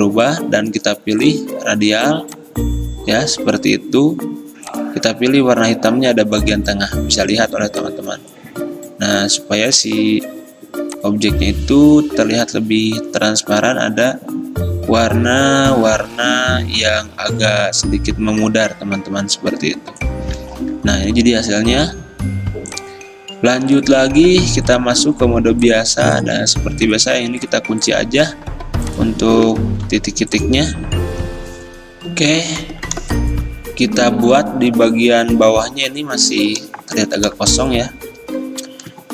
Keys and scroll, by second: 29.9 ctrl+2.